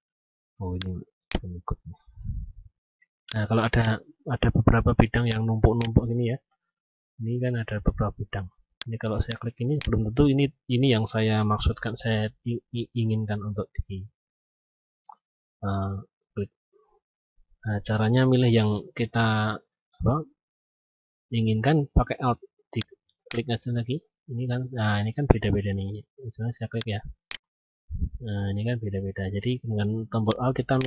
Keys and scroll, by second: 11.1 ctrl+z.